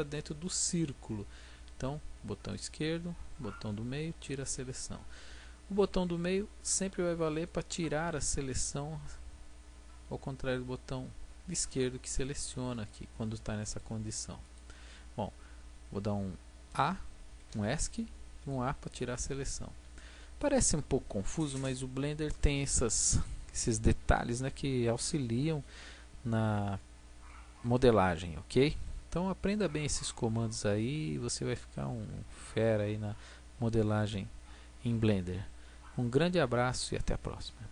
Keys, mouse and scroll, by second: 18.4 a, 31.0 middle click, 33.5 middle click, 33.8 click.